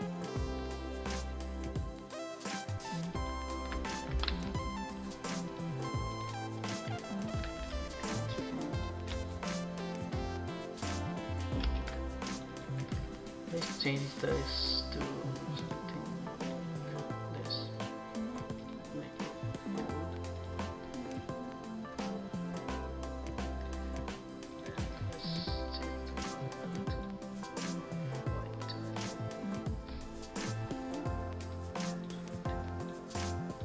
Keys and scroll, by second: 0.6 Return, 2.7 ctrl+c, 4.1 ctrl+v, 11.6 Return.